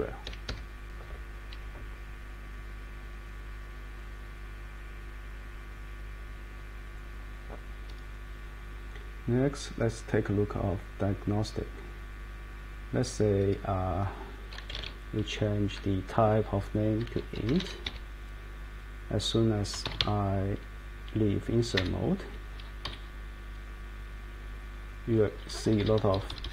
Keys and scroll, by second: 0.2 Escape, 14.4-15.2 typing, 17.1-18.1 typing, 19.7-20.5 typing, 21.7 Return, 22.8 Down, 25.1 Down, 25.5 Page_Down, 25.6 Page_Down, 25.8 Page_Down, 25.9 Page_Up, 26.1 Page_Up, 26.3 Page_Up, 26.4 Page_Up.